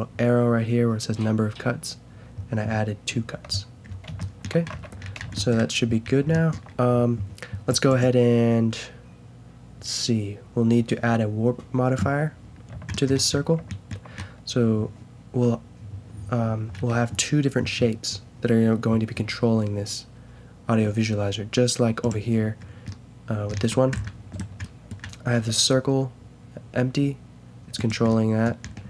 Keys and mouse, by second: 3.4 t, 4.7 Tab, 22.0 click, 22.9-24.3 middle drag, 24.3-24.8 drag, 25.3 g.